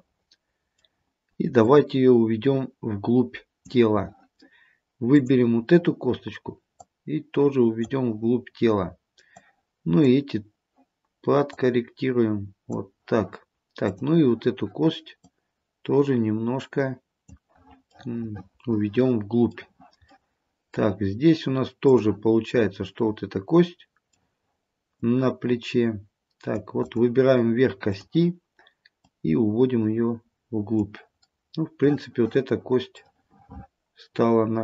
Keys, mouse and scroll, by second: 0.1 middle click, 1.7 click, 5.2 click, 7.0 click, 8.4-9.4 scroll down 1, 9.4 click, 11.5 click, 13.9 click, 15.3 click, 18.0 middle click, 20.2 middle click, 21.9 click, 22.7 middle click, 25.1 click, 27.0 click, 28.0 click, 29.1 click, 31.3 scroll up 1, 31.5 middle click, 33.1 middle click.